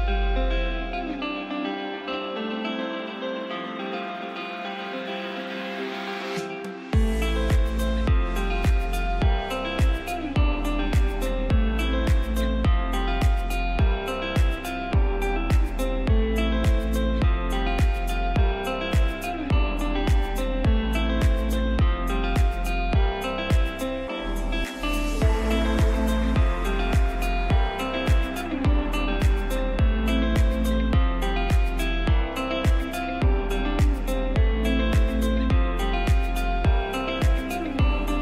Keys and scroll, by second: 15.0 space, 16.3 F2, 20.6 shift+Page_Up, 29.6 space, 30.8 ctrl+z.